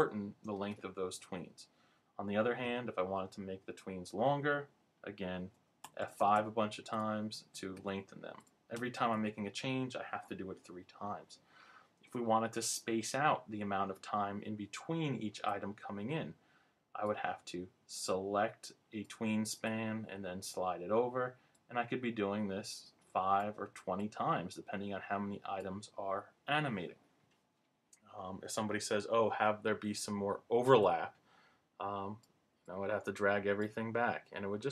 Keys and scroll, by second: 5.8 F5.